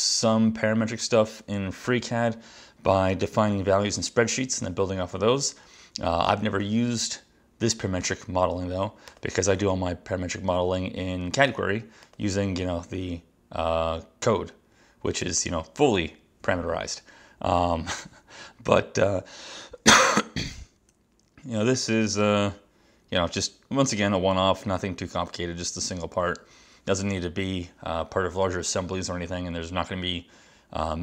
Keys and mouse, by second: 10.2 click, 11.6 click, 12.1 click, 15.3 click.